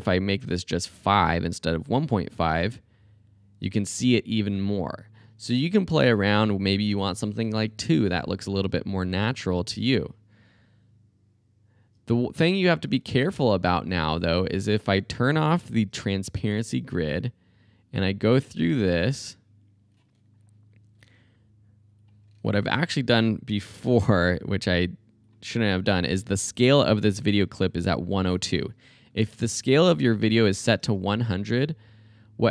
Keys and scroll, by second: 0.4 Delete, 2.5 space, 5.9 space, 7.5 BackSpace, 7.7 2, 8.5 space, 13.2 space, 24.0 s, 27.6-28.6 typing, 30.8 space.